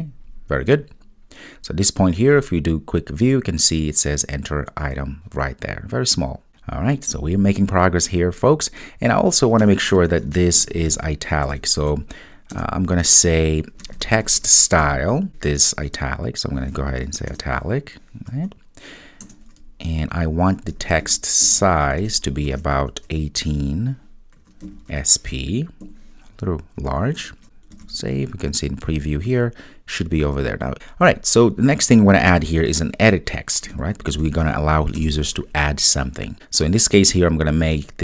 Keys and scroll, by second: 27.9 super+s, 35.1 Return.